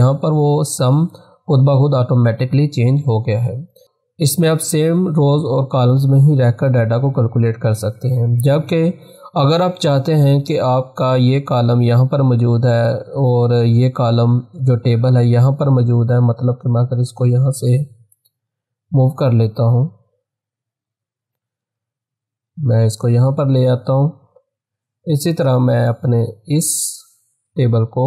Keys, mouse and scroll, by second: 10.2 click, 17.1-21.8 drag, 21.6 ctrl+x, 22.5 click, 23.0 ctrl+v, 24.3-27.3 drag, 27.3 ctrl+x.